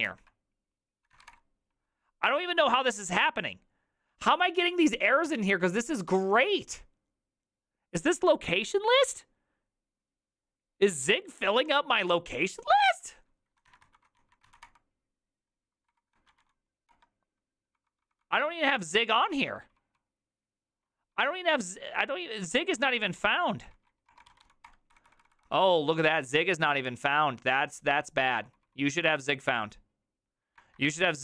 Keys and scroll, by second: 0.1 ctrl+o, 0.9-1.6 typing, 13.8-19.5 typing, 20.9-31.2 typing.